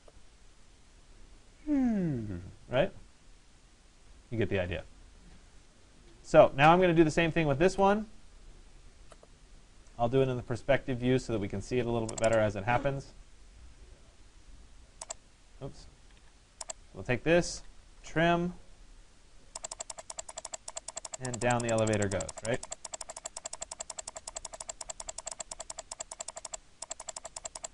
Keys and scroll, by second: 15.5 Escape.